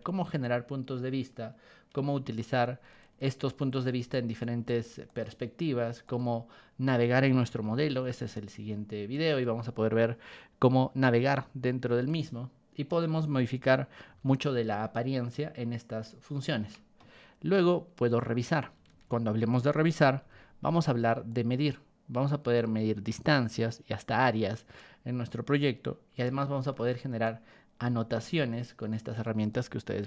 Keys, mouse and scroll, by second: 0.4-1.9 ctrl+drag, 3.6 ctrl+shift+click, 4.4 ctrl+shift+click, 5.1 right click, 6.0 click, 7.5 r, 8.3-9.4 ctrl+drag, 12.1 right click, 12.8 click, 14.1 b, 15.2-16.4 ctrl+drag, 16.5 Escape, 18.1 click, 18.9 ctrl+1, 19.5 click, 20.2 b, 21.3-22.6 ctrl+drag, 26.2 b, 27.8 r, 28.2-29.2 ctrl+drag, 29.4 right click.